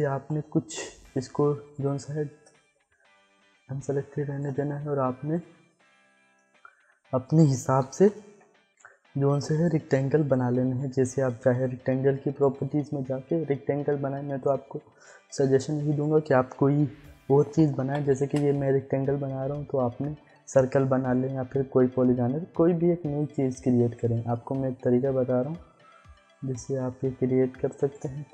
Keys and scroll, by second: 0.6 ctrl+z, 7.8 ctrl+alt+Home, 17.2 4, 17.8 5, 18.1 Return.